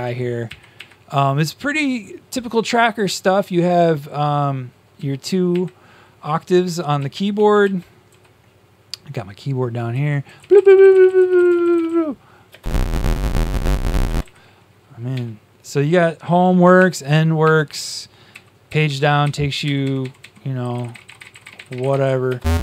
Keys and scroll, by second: 0.4 Up, 4.9 Down, 6.7-8.5 typing, 9.6-11.9 typing, 15.0 Home, 16.7 End, 17.4 Home, 18.2 Page_Down, 18.6 Page_Down, 19.6 Page_Up, 19.8 Page_Up, 20.3-22.2 typing.